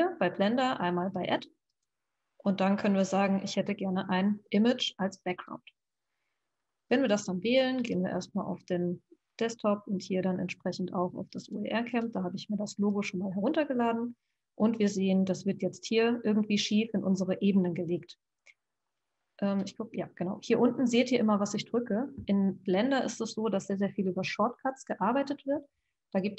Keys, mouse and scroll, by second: 1.7-4.8 drag, 19.9 Left.